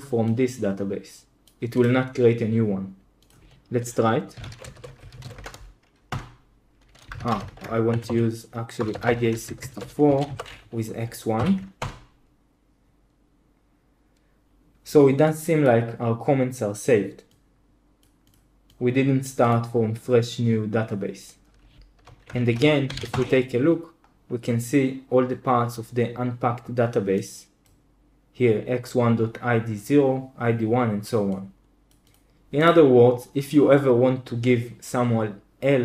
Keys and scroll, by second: 4.0-5.8 typing, 6.0 Return, 7.1 ctrl+c, 7.2-10.5 typing, 11.3 End, 11.7 Return, 22.2 super+h, 22.6-23.4 typing.